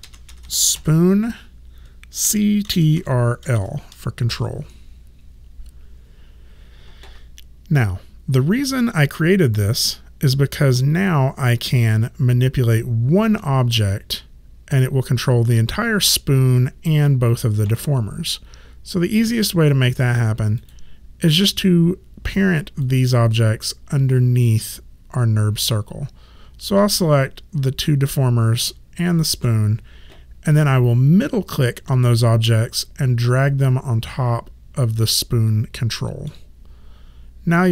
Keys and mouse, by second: 0.0-4.0 typing, 4.3 Return, 20.6 click, 22.8 ctrl+click, 29.1 ctrl+click, 32.1 middle click.